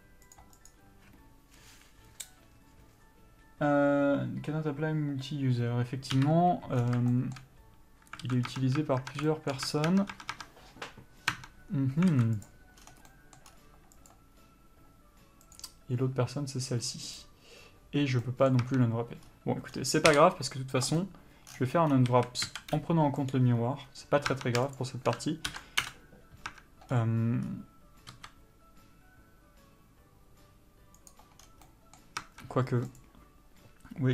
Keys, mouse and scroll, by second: 6.5 KP_Divide, 7.1-7.4 scroll down 1, 7.4 shift+middle click, 8.5 alt+a, 8.8 Tab, 9.6 shift+middle click, 10.0 Tab, 12.8 click, 13.1 scroll down 1, 13.4 middle click, 13.8-14.4 scroll up 1, 14.4 click, 18.6 middle click, 19.0 Tab, 19.6-20.0 scroll up 1, 20.0-21.3 scroll down 1, 21.3 u, 22.4 a, 22.8 s, 24.3 scroll up 1, 24.7 Tab, 25.1 shift+click, 26.2 ctrl+l, 26.2 Return, 26.8 Tab, 27.2-27.8 scroll up 1, 28.5 s, 31.7 scroll down 1, 32.0 middle click, 32.5 Tab, 33.3 click.